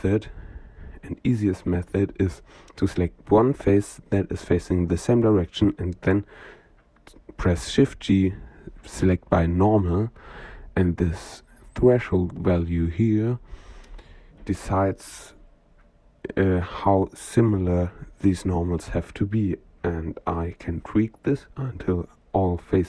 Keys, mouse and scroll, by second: 1.1 click, 2.6 shift+g, 9.4-10.4 drag, 10.4-13.1 ctrl+right drag, 14.1 middle click, 16.3 shift+middle click, 16.5 shift+click, 16.6 shift+middle click, 19.6-22.0 drag.